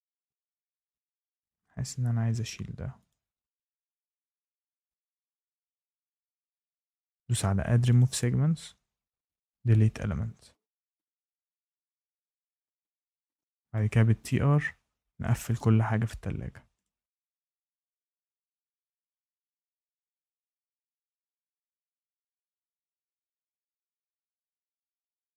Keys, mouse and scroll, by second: 1.0 click, 2.1 Delete, 3.0 click, 3.3 Delete, 5.8 click, 7.9 click, 9.4 click, 10.8 click, 11.0 click, 11.2 click, 11.4 click, 11.6 click, 11.8 click, 12.0 click, 12.2 click, 12.4 click, 12.6 click, 12.8 click, 12.9-13.3 scroll, 13.1 Escape, 13.5 shift+right click, 13.7 click, 13.8 click, 14.0 click, 14.1 click, 14.3-15.0 scroll, 14.3 click, 14.8 click, 15.0 shift+right click, 15.1 click, 15.2 click, 15.4 click, 15.4 click, 15.5-16.6 scroll, 15.5 shift+middle click, 15.6 click, 15.7 click, 15.7 shift+middle click, 15.8 click, 15.9 shift+middle click, 15.9 click, 16.0 click, 16.1 click, 16.2 shift+middle click, 16.3 click, 16.4-17.2 typing, 16.4 click, 16.7-17.0 click, 16.7 click, 16.8 click, 17.1 click, 17.1 scroll, 17.2 click, 17.3 click, 17.5 click, 17.7 Caps_Lock, 17.7 click, 17.7 right click, 17.9 click, 18.1 Escape, 18.2 Escape, 18.2 click, 18.3 Escape, 18.4 click, 18.5 click, 18.5 ctrl+z, 18.6 click, 18.7 scroll, 18.8 click, 19.0 Tab, 19.0 Tab, 19.0 Tab, 19.1 click, 19.1 Escape, 19.1 middle click, 19.2 click, 19.3 click, 19.4 click, 19.5 click, 19.5 click, 19.6 middle click, 19.7 Escape, 19.8 click, 19.9 click, 20.0 Escape, 20.1 Escape, 20.1 click, 20.2 Delete, 20.4 click, 20.5 click, 20.6 click, 20.7 Escape, 20.8 click, 20.8 click, 20.9 click, 20.9 middle click, 21.0 Escape, 21.0 click, 21.1 middle click, 21.3-22.4 click, 21.3 click, 21.4 click, 21.4 click, 22.4 Escape, 22.5 Escape, 22.5 click, 22.6 Escape, 22.9 shift+right click.